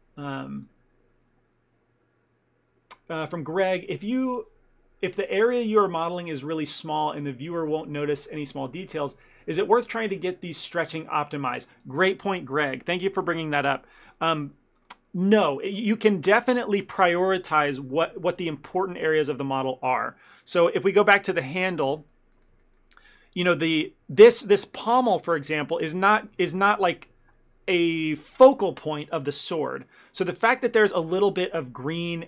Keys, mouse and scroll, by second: 14.9 click, 15.6 ctrl+middle click, 16.2 middle click, 16.5 shift+middle click, 16.7 ctrl+middle click, 20.5 ctrl+middle click, 21.0 Tab, 21.4 a, 21.6 a, 22.1 ctrl+middle click, 22.7 shift+middle click, 23.7 ctrl+middle click, 24.4 click, 24.9 shift+middle click, 25.2 ctrl+middle click, 25.5 middle click, 26.0 shift+middle click, 26.3 ctrl+middle click, 26.6 shift+middle click, 30.7 shift+middle click, 31.0-31.4 scroll up 3, 31.4 shift+middle click.